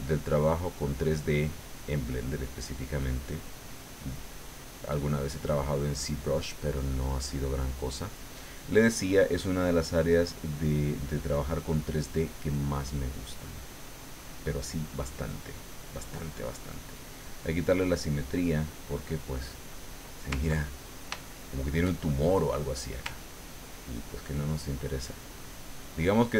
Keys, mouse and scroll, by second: 1.0-3.4 drag, 4.2 middle click, 5.3 click, 6.5 middle click, 7.4 middle click, 8.1 middle click, 10.3-12.8 drag, 13.9 click, 15.1-16.2 drag, 16.8 click, 18.2 click, 18.9-20.1 middle drag, 20.6 ctrl+middle click, 21.3-22.6 shift+middle drag, 23.3-26.3 ctrl+drag.